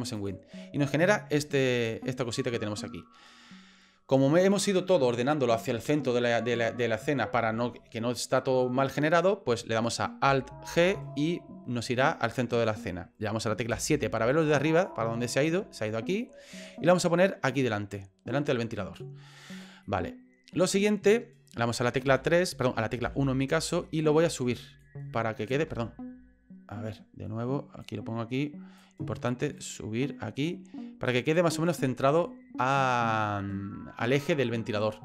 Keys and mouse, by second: 1.5 shift+middle click, 2.1 middle click, 10.7 alt+g, 13.7 KP_7, 14.6 shift+middle click, 15.9 shift+middle click, 16.9-19.0 drag, 19.9 middle click, 22.0 KP_3, 23.0 KP_1, 23.9 shift+middle click, 24.8 click, 25.7 ctrl+z, 27.8 click, 29.6-31.8 drag.